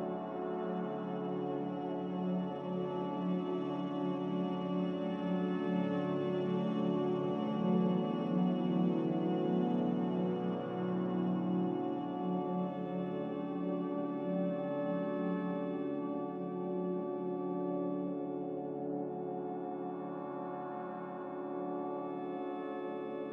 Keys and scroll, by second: 2.5 x, 6.0 a, 8.8 f.